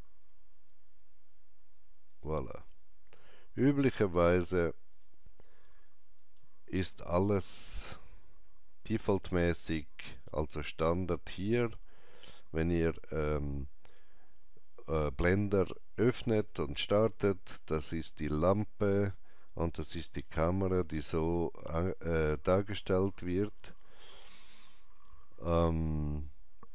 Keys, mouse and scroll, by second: 2.1 shift+click, 2.1 m, 4.9 click, 4.9 m, 6.2 click, 8.5 shift+middle click, 10.6 shift+middle click, 10.8 click, 18.2 click, 18.2 shift+middle click, 20.1 click, 20.9 click.